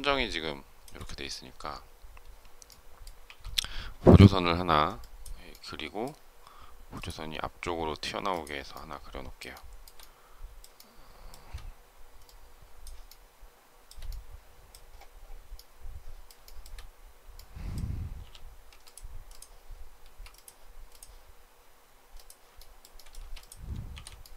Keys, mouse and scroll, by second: 9.4 shift+middle click, 10.7 shift+middle click, 13.0 shift+middle click, 16.3 shift+middle click, 19.9 space, 22.5 shift+middle click, 22.8 shift+middle click, 23.1 space, 23.8 shift+r.